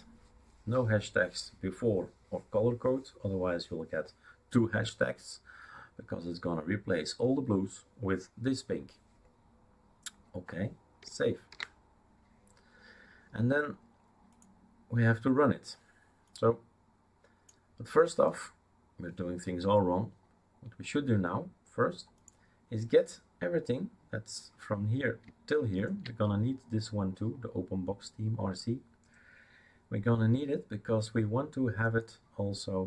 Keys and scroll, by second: 11.5 ctrl+s.